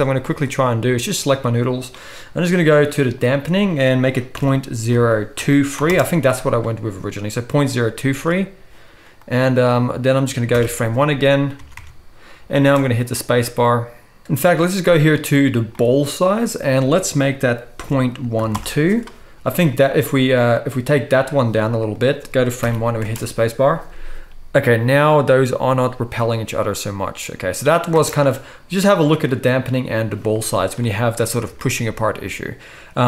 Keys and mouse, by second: 0.4 click, 3.4-19.4 drag, 8.1 ctrl+s, 10.6 shift+Left, 11.6 Tab, 11.8 Tab, 12.6 space, 19.4 ctrl+s, 22.6 shift+Left, 23.1 space, 25.2-33.0 drag, 28.0 space.